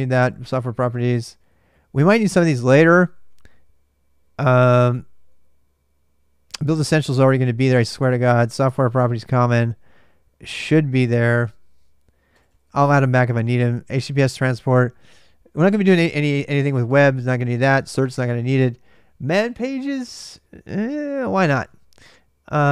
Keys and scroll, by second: 0.0-2.5 typing, 5.1 j, 6.3-7.2 typing, 11.0 ctrl+[, 11.2-12.3 typing, 15.6-17.1 typing, 21.0-21.7 typing.